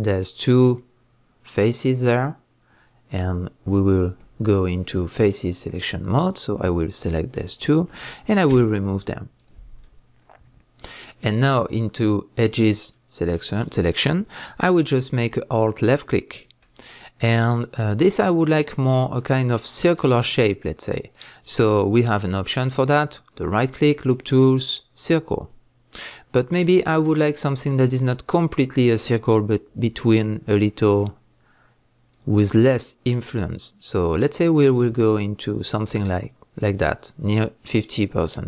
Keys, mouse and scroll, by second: 2.6-5.1 middle drag, 5.1 click, 6.2 click, 7.0 shift+click, 8.5 x, 9.8-12.5 middle drag, 12.5 click, 12.9-15.8 middle drag, 15.8 alt+click, 16.8-23.3 middle drag, 23.3-26.0 right drag, 26.0-32.1 middle drag, 32.1 drag, 33.6-38.4 drag.